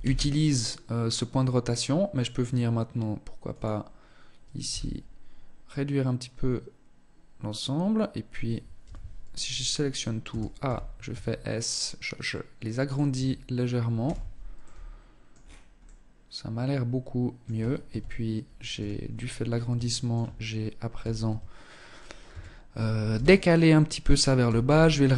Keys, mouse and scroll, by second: 3.9 z, 8.1 z, 9.2 a, 9.9 a, 10.4 s, 12.4 Tab, 13.3 z, 13.8 middle click, 14.6-15.1 scroll down 6, 15.1 middle click, 17.2 KP_1, 18.0 z, 18.4-18.8 scroll up 8, 19.0 shift+middle click, 19.4-20.6 shift+scroll up 1, 20.6 Tab, 21.5 a, 22.4 b, 23.7 g.